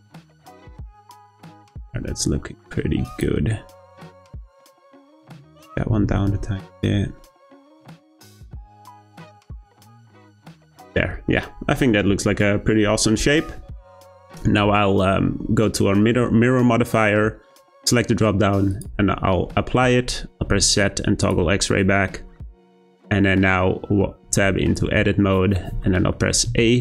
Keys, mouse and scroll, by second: 1.3 click, 1.5 g, 4.3 click, 4.5 g, 5.6 click, 5.9 g, 7.7 click, 8.0 g, 10.3 click, 11.0-14.0 scroll down 1, 17.8-19.3 drag, 19.3-20.5 scroll down 1, 20.5 z, 21.7-24.3 middle drag, 24.3 Tab, 25.8 shift+middle click, 26.5 a.